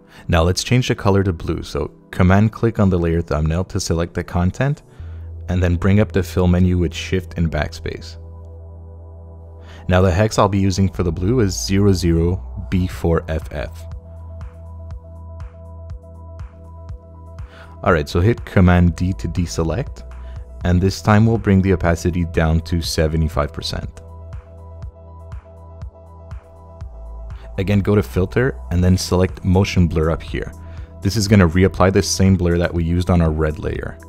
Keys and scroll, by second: 6.2 shift+super+BackSpace, 11.4 0, 12.4 b, 12.9 4, 13.7 f, 15.3 Return, 18.7 super+d, 23.3 7, 23.6 5.